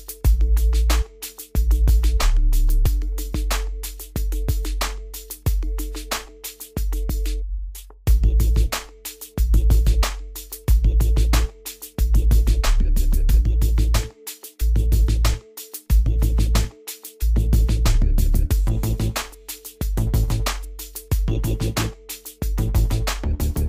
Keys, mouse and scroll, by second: 0.4-0.8 scroll down 1, 1.2 scroll up 1, 3.4-3.7 scroll down 1, 5.1 click, 5.6-6.1 scroll up 1, 6.1 click, 7.9 scroll up 1, 8.2-9.0 scroll down 1, 12.0 click, 13.0 scroll up 1, 14.2 click, 16.8 Delete, 18.5 click, 19.8 scroll down 1, 21.2 click, 23.1-23.5 scroll down 1.